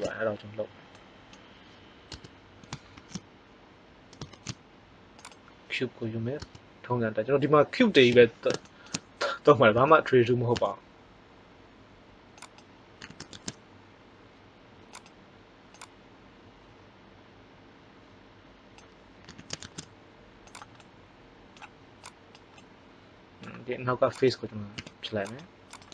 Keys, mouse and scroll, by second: 2.0 Tab, 2.9 shift+a, 4.2 shift+a, 6.3 Tab, 8.0 KP_1, 9.7 s, 12.9 s, 15.7-17.1 drag, 19.2 s, 20.7 middle click, 22.0-24.1 drag, 24.1 right click, 24.7 x.